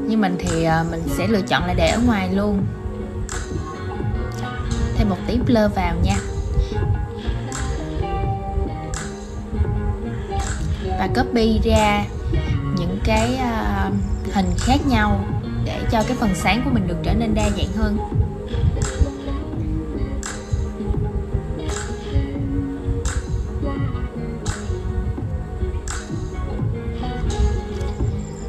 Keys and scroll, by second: 7.9 super+z, 19.9 super+z.